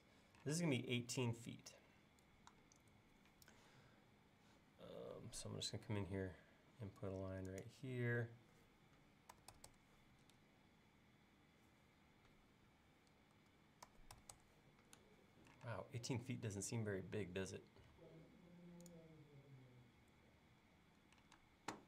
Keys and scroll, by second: 0.6 space, 5.5 l, 9.1-10.4 typing, 13.4-13.9 typing, 15.1-15.7 typing, 18.0 l, 21.4 space.